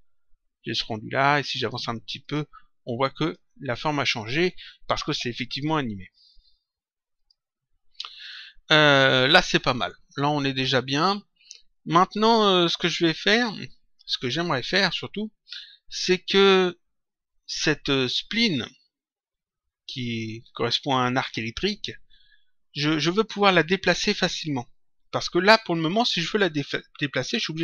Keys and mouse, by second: 1.4 click, 7.1 click, 20.4 click, 27.2 click.